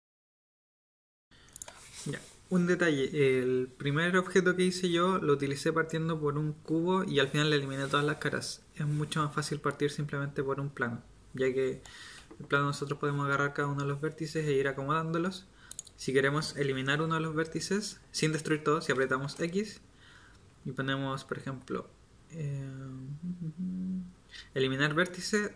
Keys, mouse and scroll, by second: 0.8 shift+a, 1.1 g, 19.2 x.